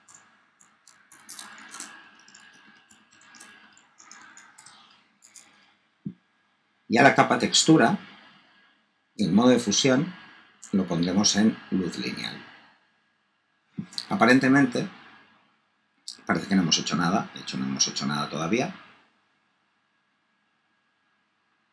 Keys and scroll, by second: 0.0-4.5 typing, 4.5 Return.